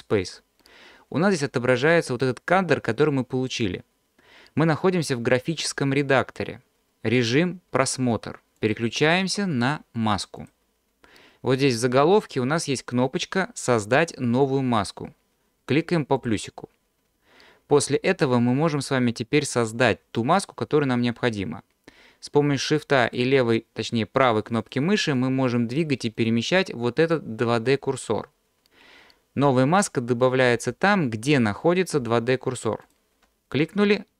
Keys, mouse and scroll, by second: 0.0 click, 8.6-10.6 drag, 11.7-14.4 scroll down 4, 16.2 click, 18.2 scroll up 1, 19.1 scroll down 1, 23.1 shift+click, 24.2 shift+right click, 24.7 shift+right drag, 25.1 shift+right click, 25.7 shift+right drag, 32.8 shift+right click.